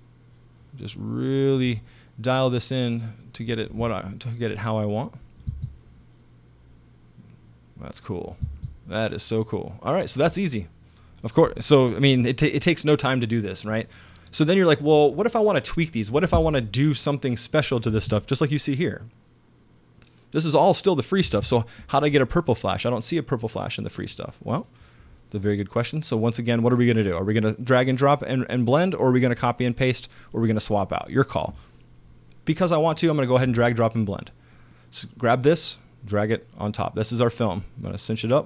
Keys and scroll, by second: 5.5 space, 8.4 space, 17.9 space, 21.2 space.